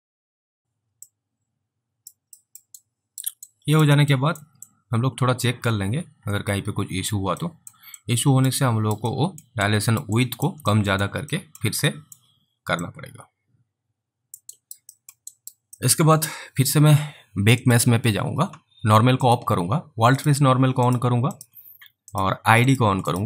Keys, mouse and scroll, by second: 0.2 click, 0.6 click, 1.3 alt+click, 2.6 alt+middle click, 3.1 alt+right click, 3.7 alt+right click, 4.4 alt+middle click, 4.9 alt+click, 7.7 alt+middle click, 8.2 alt+click, 9.4 alt+middle click, 9.9 alt+right click, 10.9 alt+click, 11.0 alt+middle click, 11.6 alt+middle click, 12.2 alt+middle click, 13.1 alt+click, 14.8 alt+right click, 15.0 alt+middle click, 15.6 alt+right click, 15.8 alt+middle click, 17.7 click, 21.4 double click, 22.1 click.